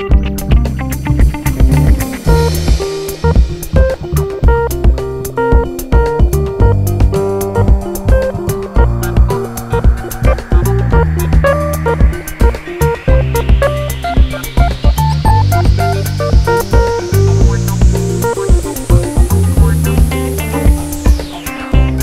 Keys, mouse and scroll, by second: 0.5 right click, 0.9 scroll down 1, 1.4 click, 1.6 shift+click, 3.0-8.2 typing, 3.6 scroll down 1, 5.0 click, 6.2 click, 6.7 click, 6.8 shift+click, 7.1 click, 8.0 click, 8.2 shift+click, 8.9 click, 9.1 shift+click, 9.3-14.8 typing, 9.8 click, 10.4 click, 10.7 click, 11.2 click, 12.6 click, 13.2 click, 14.1 click, 15.5 click, 15.8 shift+click, 15.9-18.2 typing, 16.1 click, 16.6 click, 16.8 shift+click, 17.4 click, 18.0 click, 18.6 right click, 18.8 ctrl+z, 19.8 click, 19.9 g, 20.5 click, 20.6 alt+a, 21.1 2, 21.3 click, 21.9 1.